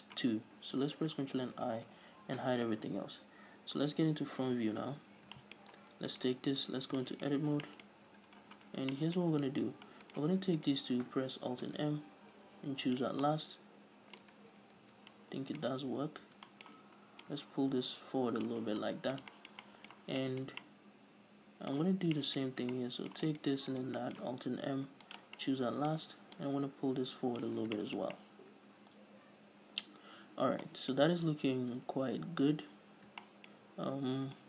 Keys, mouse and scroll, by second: 0.2 shift+right click, 1.9 ctrl+i, 3.0 h, 4.7 KP_1, 5.7-6.0 shift+middle drag, 6.0-6.4 scroll up 2, 6.4 right click, 6.8 scroll up 1, 6.9 Tab, 7.3-10.4 shift+middle drag, 7.7-8.7 scroll up 4, 8.7-9.3 scroll down 2, 10.4 right click, 10.9 shift+right click, 12.0 alt+m, 13.6-17.6 middle drag, 14.7 ctrl+z, 16.1 ctrl+z, 17.6-19.2 drag, 19.0 scroll down 1, 19.2-23.6 middle drag, 20.4 scroll down 1, 22.9 scroll up 2, 23.6 right click, 24.1 shift+right click, 24.3-26.7 middle drag, 25.1 alt+m, 26.7-28.1 drag, 28.0 scroll down 2, 28.1-34.4 shift+middle drag, 30.5-31.0 scroll up 2, 33.1 scroll down 1, 34.0 scroll up 1.